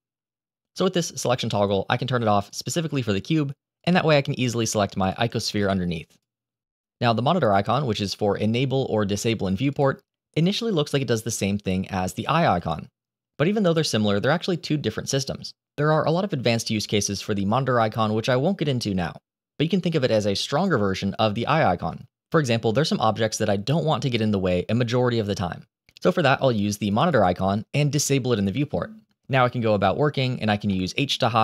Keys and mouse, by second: 0.0-0.3 drag, 2.3 click, 3.7 click, 4.4 click, 4.9 click, 5.5 click, 6.0 click, 9.1 click, 9.6 click, 12.0 click, 12.4 click, 26.9 click, 29.6 click, 30.0 middle drag, 30.6 shift+middle drag.